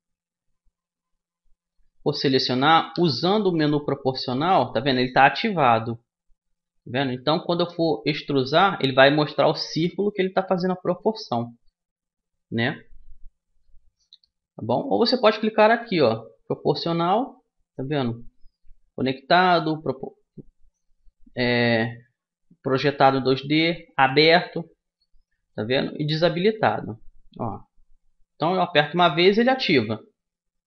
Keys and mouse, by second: 2.6 o, 7.5-9.3 drag, 11.6-14.6 middle drag, 13.7 o, 14.6 o, 15.4-17.4 drag, 28.4 o.